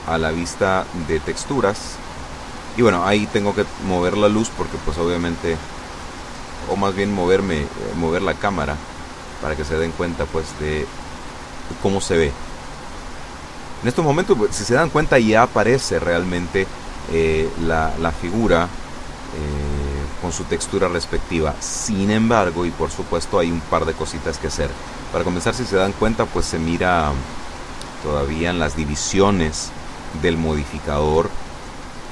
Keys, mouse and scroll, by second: 0.7 click, 1.6 click, 4.0 right click, 4.8-5.8 middle drag, 6.3-8.0 middle drag, 8.3-9.6 drag, 10.4 middle click, 11.1-12.3 drag, 12.3-13.5 middle drag, 13.5-14.1 scroll up 1, 14.9 scroll down 1, 17.2-19.9 middle drag, 21.4 click, 22.6 scroll down 1, 22.9-25.9 middle drag, 26.1-27.3 middle drag.